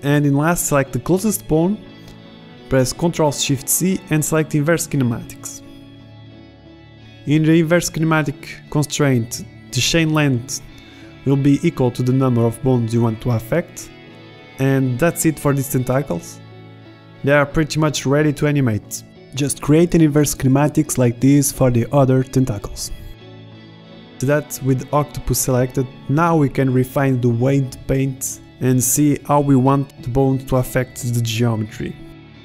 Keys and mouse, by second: 4.9 ctrl+shift+c, 17.7 g, 18.7 ctrl+shift+c, 19.8 middle click, 20.2 middle click, 20.5 right click, 20.8 right click, 21.2 ctrl+shift+c, 23.0 g, 25.3 g, 29.1-31.7 middle drag.